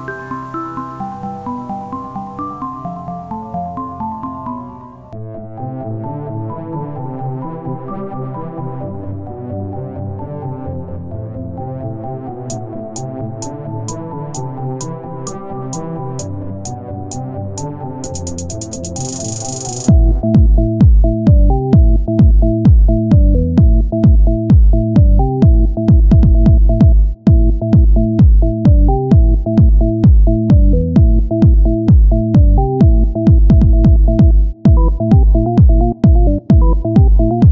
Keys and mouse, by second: 3.5 ctrl+Tab, 5.0 z, 5.4 z, 7.3 ctrl+Tab, 15.2 KP_1, 15.6 z, 17.4 z, 17.5 KP_1, 17.8 z, 18.3 ctrl+Tab, 19.9 click, 20.7 c, 22.0-23.6 drag, 23.2 c, 24.6 click, 25.5 r, 27.6 click, 27.9 right click, 28.3 x, 29.2 c, 30.3-32.6 drag, 32.6 right click, 32.8 c, 34.2-36.9 drag, 36.6 right click, 36.9 x.